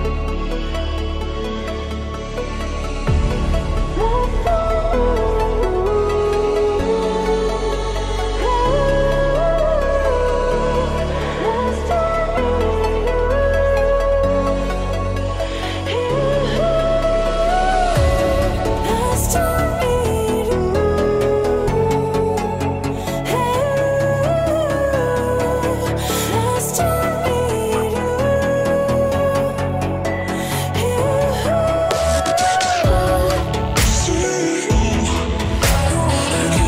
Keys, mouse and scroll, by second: 0.9 click, 1.7 click, 3.0 click, 3.7 e, 5.3 click, 5.8 e, 7.3 click, 8.3 click, 8.9 e, 10.7 click, 11.3 e, 12.5 click, 13.0 scroll down 1, 13.7 scroll up 2, 13.8-14.3 scroll down 2, 16.4-17.2 drag, 17.6 click, 18.0-18.7 scroll down 2, 18.5 click, 19.3 middle click, 19.7 shift+click, 20.6 ctrl+p, 25.6-26.0 middle drag, 26.2 scroll down 1, 26.4 click, 27.4-28.1 drag, 28.5-29.4 middle drag, 29.5 r, 31.2 click, 31.8 ctrl+z, 32.5 ctrl+z, 33.2-34.4 scroll up 1, 34.4 scroll up 1, 34.5-35.0 drag, 35.4 middle click, 35.7-36.4 scroll up 1.